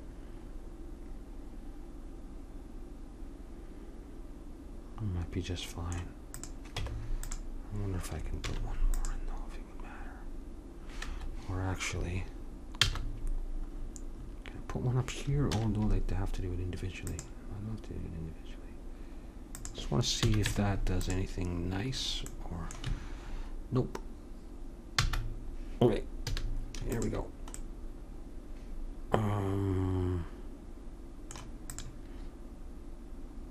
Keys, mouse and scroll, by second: 6.3 click, 6.8 Tab, 8.4 ctrl+r, 12.8 ctrl+z, 15.5 ctrl+r, 20.2 a, 20.4 Tab, 25.0 ctrl+z, 26.3 a, 26.9-28.8 drag, 31.7-33.5 drag.